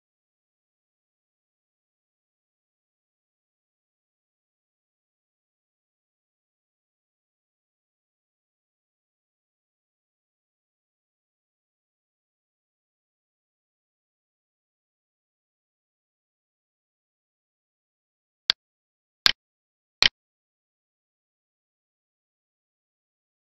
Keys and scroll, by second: 0.9 Right, 3.0 Right, 5.3 ctrl+s, 5.8 End, 7.0 ctrl+v, 7.6 ctrl+Left, 10.8 ctrl+Right, 12.5 ctrl+Right, 14.8 ctrl+s.